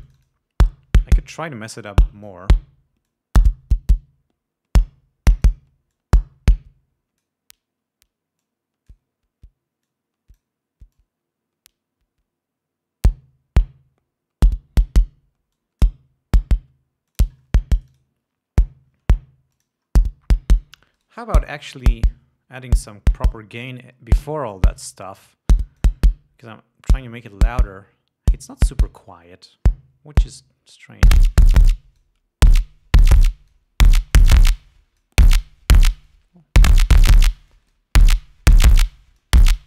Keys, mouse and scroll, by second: 0.4 click, 2.1 click, 3.4-6.0 drag, 6.3-7.8 drag, 8.8 click, 10.2 click, 11.3-15.4 drag, 15.9 click, 17.5-18.5 drag, 19.9 click, 21.4 right click, 24.0 click, 26.0 click, 30.6-32.6 drag, 33.6-34.1 drag, 34.5-35.6 drag, 36.4-37.8 drag, 37.9-38.3 drag, 39.2-39.6 drag.